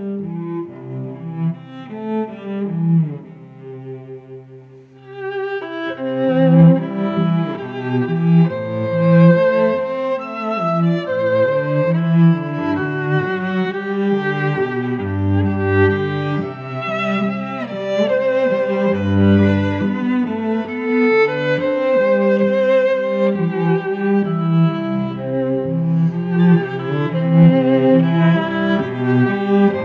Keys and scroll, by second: 0.9 Return, 1.3 v, 7.1 alt+Down, 7.9 shift+Up, 8.2 Down, 9.3 alt+Down, 10.0 shift+Up, 10.2 Down, 11.3 alt+Down, 12.0 Up, 13.5 alt+Down, 14.3 Down, 15.6 alt+Down, 16.4 Up, 17.1 Down, 17.6 alt+Down, 18.4 Down, 19.3 alt+Down, 20.0 Down, 20.7 alt+Down, 21.3 Down, 22.2 alt+Down, 23.0 Up, 24.0 alt+Down, 24.7 Up, 25.2 alt+Down, 25.9 Down, 27.2 alt+Down, 27.9 Up, 28.4 alt+Down, 29.1 Up, 29.6 alt+Down.